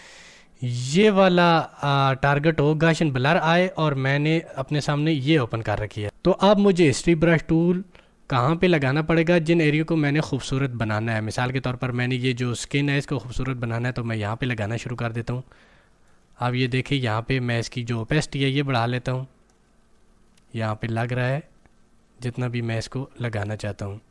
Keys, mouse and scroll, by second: 0.9 click, 4.9 click, 13.1-16.8 drag.